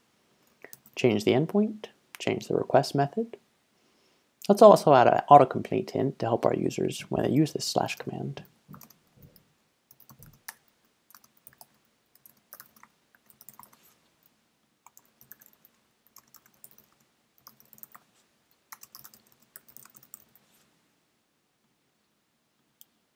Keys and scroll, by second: 0.5 super+a, 0.8 super+v, 7.1-20.9 typing.